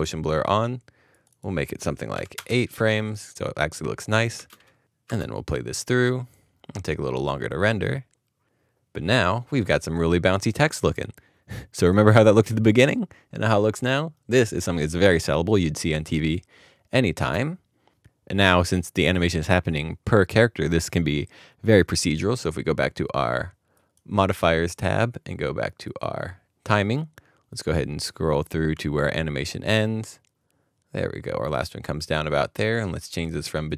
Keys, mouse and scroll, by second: 1.3 space, 2.3 8, 4.3 Return, 4.9 space, 17.1 space.